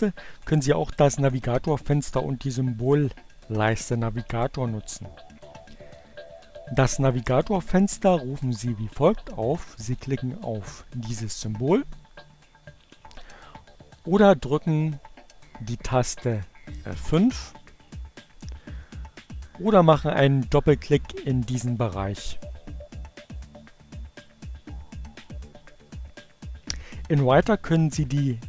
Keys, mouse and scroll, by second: 10.0 click, 13.7 click, 14.9 F5, 17.8 click, 20.6-22.1 drag, 25.4 click.